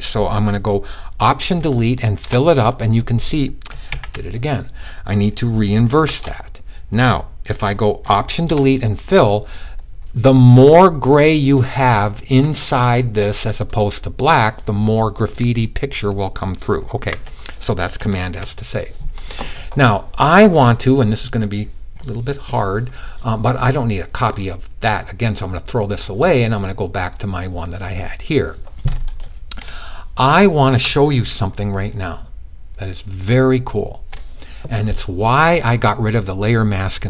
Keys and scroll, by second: 3.3 alt+super+z, 5.5 shift+super+i, 16.5 super+d, 17.7 super+s.